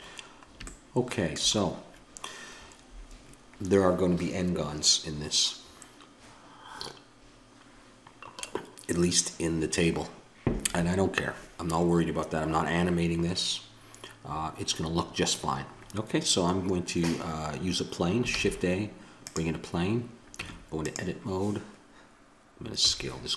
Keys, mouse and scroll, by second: 13.7-17.1 middle drag, 18.3 shift+a, 20.3 Tab, 22.8 s.